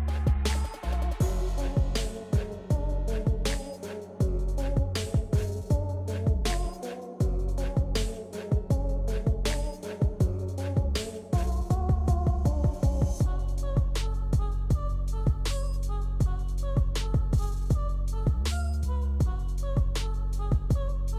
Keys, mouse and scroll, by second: 1.8 ctrl+scroll up 1, 5.7 click, 8.5-10.5 drag, 10.5 ctrl+z, 14.0 ctrl+z, 14.5 ctrl+z, 15.8 click, 18.3 typing, 18.9 ctrl+z.